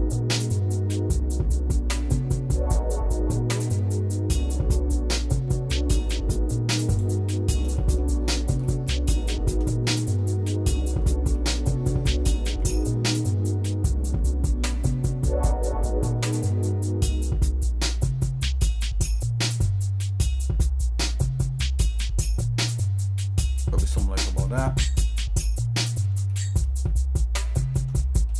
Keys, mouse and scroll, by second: 7.3 shift+middle click, 7.8 middle click, 8.2-8.6 scroll down 2, 8.6 middle click, 9.3 shift+middle click, 9.8 scroll up 1, 10.4 scroll up 1, 10.4 middle click, 10.9-11.3 scroll up 2, 11.3 middle click, 12.5 e, 24.0 middle click, 24.5-26.0 shift+middle drag, 26.3 middle click, 26.9 shift+middle click, 28.0 middle click.